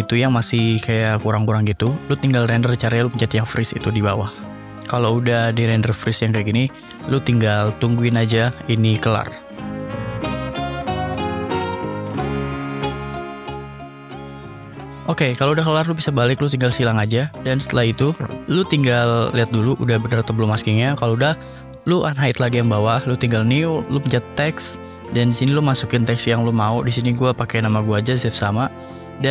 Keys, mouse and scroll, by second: 1.5 ctrl+s, 1.6-2.3 middle drag, 3.0 click, 13.6 click, 14.5 click, 14.7 click, 15.0 ctrl+s, 16.3 click, 20.1 click, 20.6 click, 21.5 click, 22.2 click, 23.1 right click, 24.1 click, 25.7 click, 26.8 click, 27.0 click, 27.3 Caps_Lock, 27.4-29.3 typing.